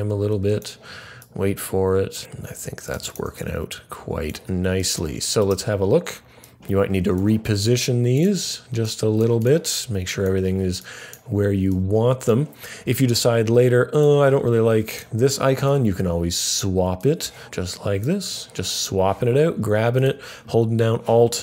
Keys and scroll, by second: 0.2 F9.